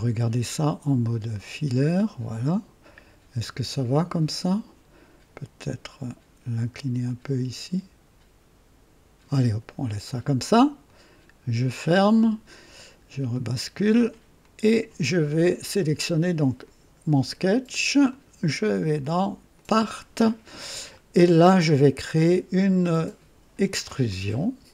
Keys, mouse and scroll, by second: 1.2 click, 7.0-9.2 drag, 10.8 click, 13.2 click, 14.4-15.3 drag, 16.5 click, 18.0 click, 19.5 click, 20.6-20.9 scroll down 2, 21.2-22.2 drag, 24.0 click.